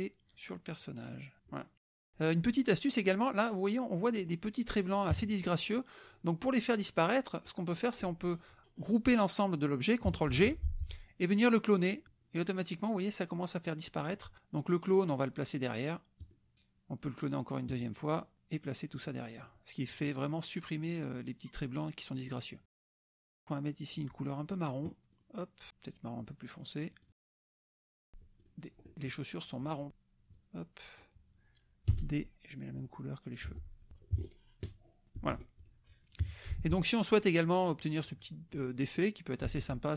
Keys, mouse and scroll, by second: 1.5 click, 1.9 click, 4.2 click, 4.4-6.0 middle drag, 4.4-5.1 scroll down 1, 5.1 KP_Subtract, 5.1-5.7 scroll down 1, 5.7-6.0 scroll down 1, 6.0-7.6 drag, 10.3 ctrl+g, 12.0 click, 16.2 click, 17.7 click, 19.0 click, 19.4 click, 22.2 click, 23.5 click, 25.3 click, 26.4 click, 27.1 click, 28.1 d, 28.4 click, 28.9 alt+Tab, 28.9 alt+click, 29.7 click, 30.3 click, 31.2-31.9 scroll up 1, 31.9-32.5 scroll up 1, 31.9 d, 32.8 click, 33.4 F1, 35.1 ctrl+g, 35.6 ctrl+click, 36.2 KP_Subtract, 36.6 alt+Tab, 39.5 alt+Tab.